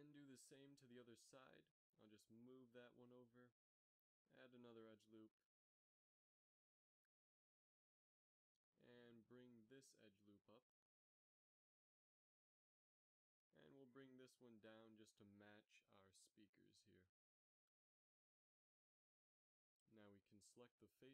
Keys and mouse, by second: 2.8 right click, 3.3 g, 5.6 ctrl+r, 9.9 right click, 10.9 g, 15.2-16.2 right drag, 15.8 g, 17.6 z, 19.5 ctrl+Tab.